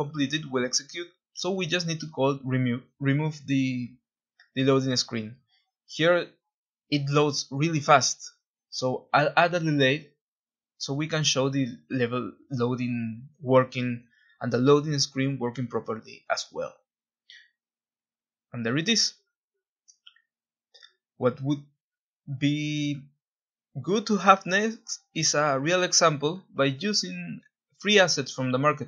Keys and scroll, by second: 1.0 w, 1.5 w, 4.5 Escape, 7.5-9.9 typing, 12.4 w, 12.9 w, 12.9 w, 17.4-19.4 typing.